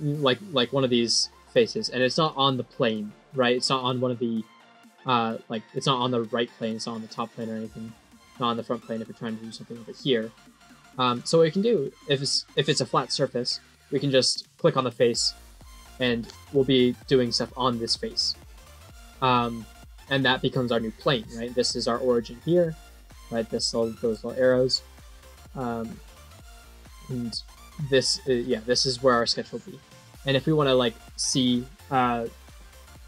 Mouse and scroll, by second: 0.4 click, 1.3 middle click, 2.1 click, 2.7 click, 3.0 middle click, 4.3 click, 4.8 click, 6.6 click, 7.3 click, 8.7 click, 9.7 click, 11.0 click, 12.2 click, 12.8 middle click, 14.2 click, 16.2 middle click, 21.4 middle click, 22.0 scroll down 5, 24.1 middle click, 24.9 middle click, 25.4 scroll up 2, 26.1 scroll down 1.